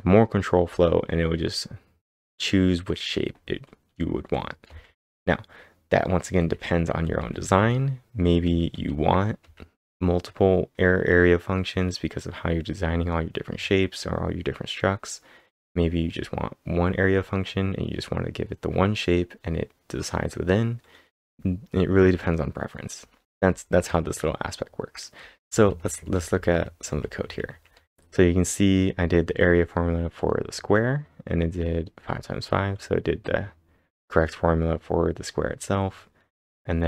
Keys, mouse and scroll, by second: 4.7 typing, 6.2-9.4 typing, 23.1-27.7 typing.